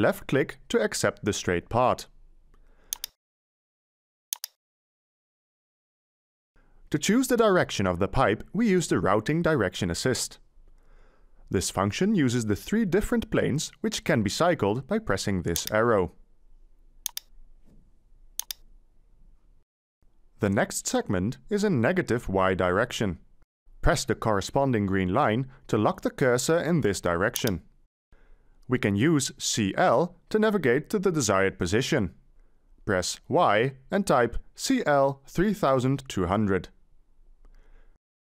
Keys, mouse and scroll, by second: 6.0-7.3 middle drag, 11.7-13.1 middle drag, 11.7-13.1 scroll, 34.4 Delete, 35.4-38.2 typing.